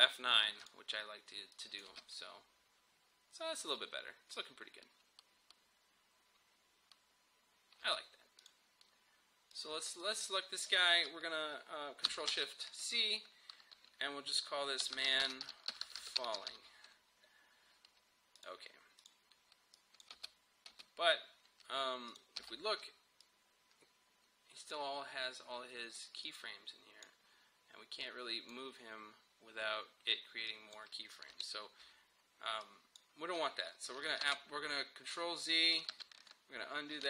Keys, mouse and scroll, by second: 1.8 space, 7.8 space, 8.4 click, 12.3 ctrl+shift+c, 14.6-17.0 typing, 18.4 click, 20.2 space, 22.1 click, 22.4 u, 23.2-30.5 drag, 31.3 Delete, 32.6-34.2 drag, 34.2 ctrl+z, 35.9 ctrl+z.